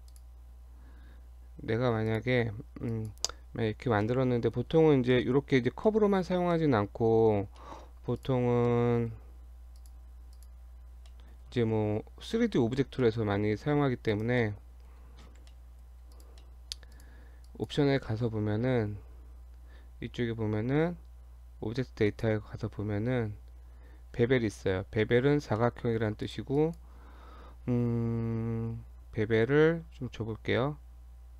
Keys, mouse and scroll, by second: 0.1 click, 2.1 click, 2.9 click, 4.1 middle click, 4.8 Tab, 5.1 middle click, 5.9 middle click, 6.3 Tab, 6.6 middle click, 7.6 middle click, 7.8 scroll down 1, 8.2 click, 8.5 scroll down 1, 8.7 middle click, 9.8 click, 10.4 click, 11.1 middle click, 11.7 f, 12.7 g, 14.4 middle click, 15.4 g, 16.4 middle click, 17.0 click, 17.5 click, 18.1 middle click, 22.0 click, 23.0-24.0 scroll down 4, 25.6 middle click, 26.2 click, 26.6 click.